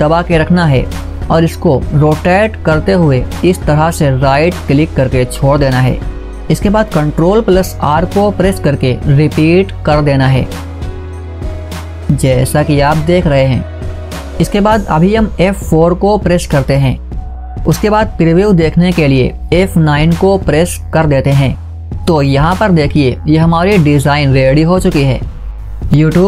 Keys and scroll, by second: 15.3 F4, 19.3 F9.